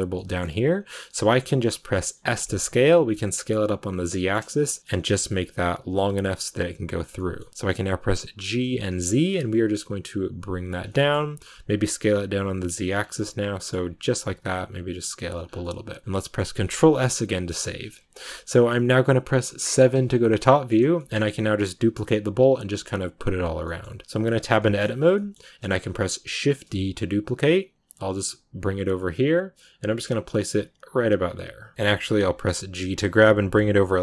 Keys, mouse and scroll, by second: 2.2 s, 4.0 middle click, 4.8 s, 7.1-8.3 middle drag, 8.3 g, 10.8 middle click, 11.3 s, 12.9 scroll down 3, 12.9 Tab, 13.0 middle click, 13.6 middle click, 13.7 Tab, 15.3 Tab, 15.4 scroll down 3, 15.5-19.6 middle drag, 19.6 KP_7, 20.3-24.1 shift+middle drag, 24.1 Tab, 24.5 shift+middle click, 24.7 scroll up 1, 24.9 scroll down 1, 25.0 shift+middle click, 25.7-26.4 scroll down 1, 26.4 shift+d.